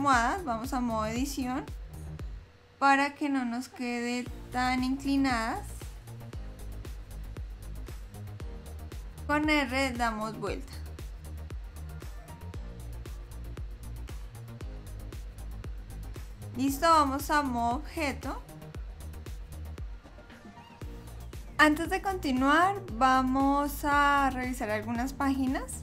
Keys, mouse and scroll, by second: 2.7 click, 6.6 click, 7.4 l, 8.4 l, 14.5 click, 19.5 click.